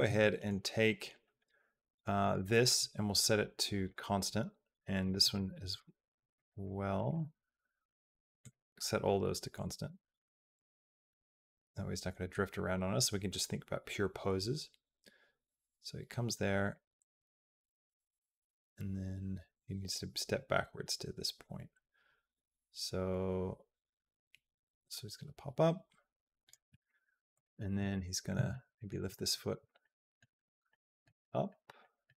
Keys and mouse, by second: 0.1 shift+middle click, 2.1-3.8 right drag, 4.8 click, 5.0 right click, 6.2 click, 6.8-8.3 right drag, 9.4-26.4 drag, 27.1 click, 27.8 middle click, 28.4 shift+middle click, 29.7 shift+middle click, 30.6 middle click, 31.0 shift+middle click, 31.6 middle click.